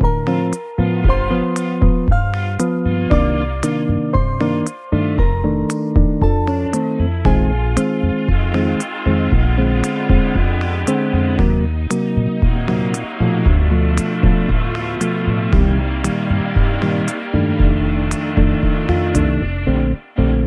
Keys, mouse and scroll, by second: 0.3 shift+d, 1.6 r, 3.0 g, 10.1 middle click, 11.8 KP_7, 12.8 r, 13.7 g, 15.2 KP_0, 16.6 scroll down 2, 17.1-17.5 scroll up 2.